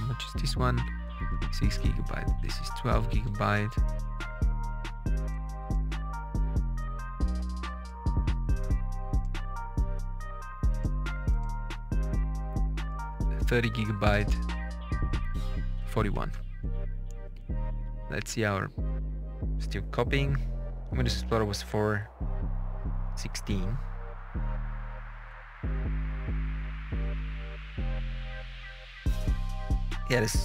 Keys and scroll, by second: 0.8 space, 1.1 Up, 1.4 space, 2.4 space, 2.9 Up, 3.2 space, 12.9 space, 13.5 Up, 13.6 space, 15.5 space, 16.2 alt+Tab.